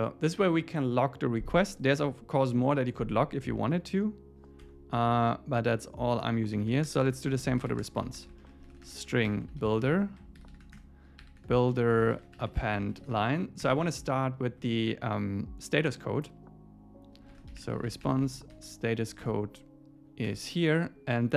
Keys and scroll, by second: 4.6 Tab, 10.8 Return, 13.7 Return, 14.5 Left, 19.2 Return, 19.9 super+Right, 20.3 Return.